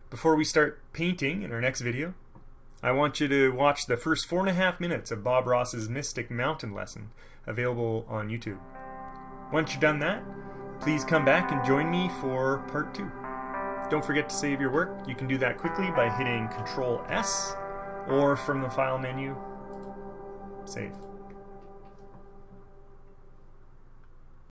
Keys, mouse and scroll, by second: 17.2 ctrl+s, 19.9 click, 20.1-21.1 scroll up 2, 21.1 scroll down 2.